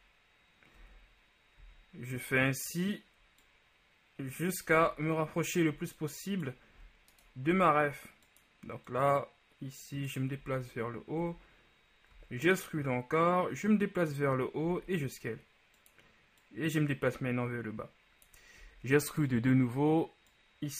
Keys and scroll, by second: 4.8 z, 6.9 e, 7.6 s, 10.6 z, 14.8 s, 18.8 e.